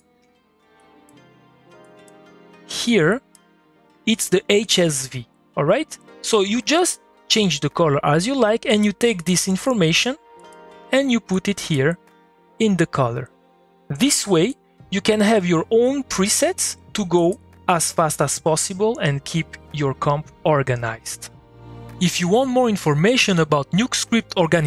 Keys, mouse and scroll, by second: 0.8-12.8 drag, 14.4-17.2 drag, 17.6 scroll down 1, 17.8 middle click, 18.3 click.